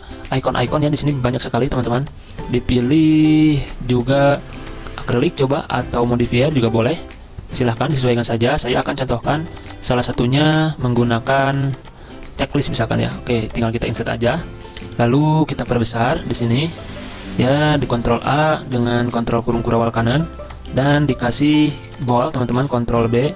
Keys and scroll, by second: 18.0 ctrl+a, 18.7 ctrl+], 18.8 ctrl+], 18.9 ctrl+], 19.1 ctrl+], 22.1 ctrl+a, 22.5 ctrl+b.